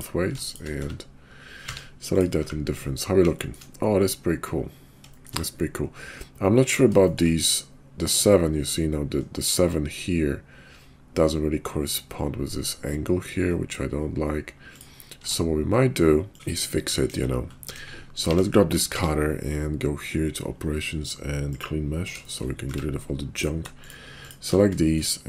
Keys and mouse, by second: 0.7 1, 1.6 q, 2.4 `, 3.4 shift+drag, 5.2 shift+drag, 7.1 shift+click, 15.1 q, 16.3 Tab, 16.3 KP_5, 17.0 KP_5, 17.7 KP_5, 18.3 Tab, 18.9 q, 22.6 Tab, 24.9 shift+click.